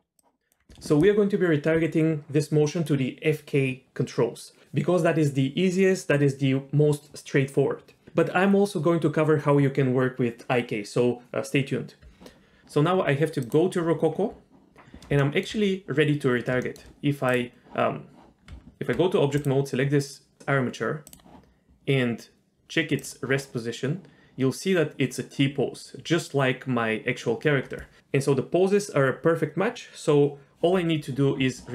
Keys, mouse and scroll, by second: 0.2 click, 13.4 click, 15.3 shift+middle click, 16.3 scroll down 1, 16.6 shift+middle click, 17.3 click, 18.5 Tab, 19.4 click, 21.0 click, 23.0 click.